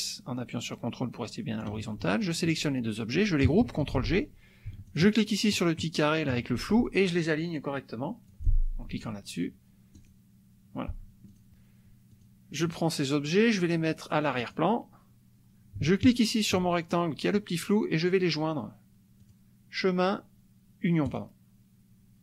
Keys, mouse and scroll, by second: 2.2 shift+click, 4.1 ctrl+g, 4.8 shift+click, 8.5 click, 9.9 click, 11.3 click, 12.1 click, 14.3 click, 16.1 shift+click, 19.2 click, 21.0 click.